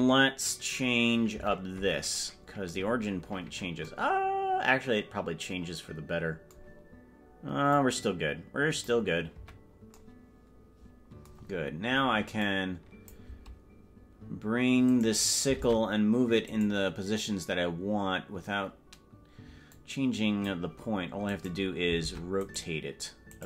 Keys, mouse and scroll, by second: 1.4 KP_Decimal, 3.0 scroll down 3, 3.2-3.8 scroll down 6, 7.9-9.0 drag, 9.4 KP_Decimal, 12.6 click, 15.2 right click, 15.8 ctrl+Tab, 16.6 right click, 19.9 click, 21.4 right click, 22.2 ctrl+Tab, 22.8 right click.